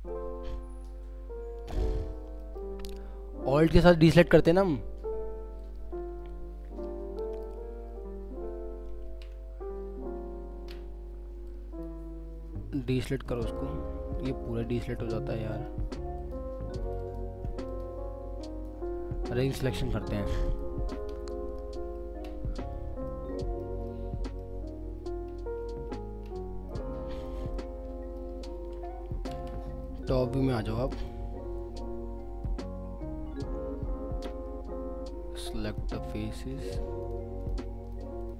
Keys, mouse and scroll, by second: 2.1-2.4 scroll down 1, 2.4 middle click, 3.0 scroll up 1, 3.7 middle click, 4.7 scroll down 1, 5.6 alt+click, 8.3 scroll, 8.5 scroll up 1, 9.1 ctrl+z, 10.2 scroll up 1, 12.7 alt+click, 14.7 alt+middle click, 17.0 ctrl+double click, 21.9-22.9 scroll up 1, 23.1 alt+middle click, 25.0 scroll down 1, 25.5-26.4 scroll up 1, 26.7 alt+middle click, 29.3 alt+w, 29.8 middle click, 30.2 scroll up 1, 30.9 middle click, 31.3 scroll down 1, 37.0 ctrl+click.